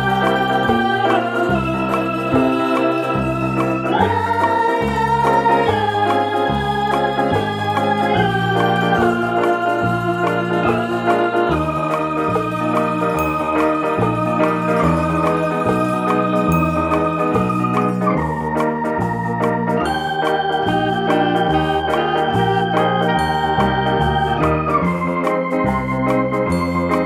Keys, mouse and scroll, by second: 0.0 right click, 0.8-2.3 drag, 2.3-3.3 middle drag, 3.3 right click, 3.8 shift+right click, 4.9 ctrl+j, 8.4 ctrl+z, 8.9 right click, 10.0-11.5 drag, 11.5-12.1 middle drag, 12.1 shift+right click, 13.0 ctrl+j, 13.8-20.0 middle drag, 15.1 Tab, 16.3 a, 17.3 ctrl+f, 20.0-21.9 drag, 21.9-23.4 middle drag, 23.4-24.4 middle drag, 24.1 Tab, 24.4-27.0 middle drag, 25.1 ctrl+a.